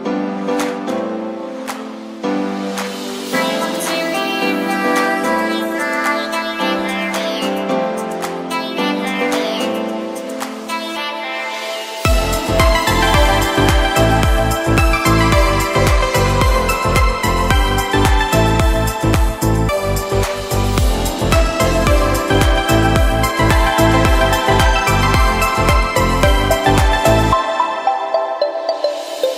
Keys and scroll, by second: 0.6 e, 5.6 b, 11.8 e, 14.2 ], 24.0 v, 24.4 z, 26.0 v.